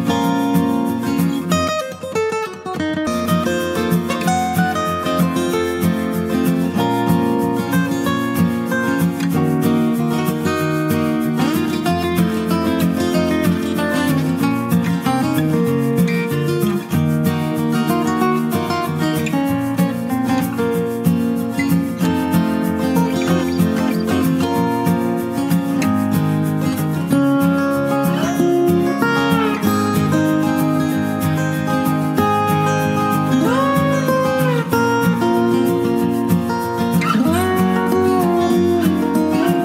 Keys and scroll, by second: 24.0 ctrl+space, 24.5 ctrl+space, 24.7 ctrl+space, 39.2 ctrl+space.